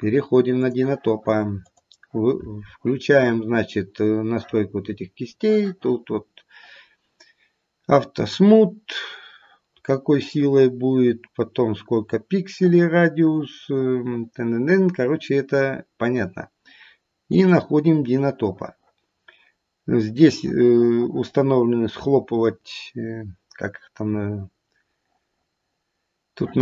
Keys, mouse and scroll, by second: 1.5 click, 4.8-5.3 scroll down 1, 14.4-15.8 scroll down 5, 15.8-17.2 scroll down 1, 17.2 click, 17.8-18.8 scroll down 1, 18.8-20.3 scroll down 1.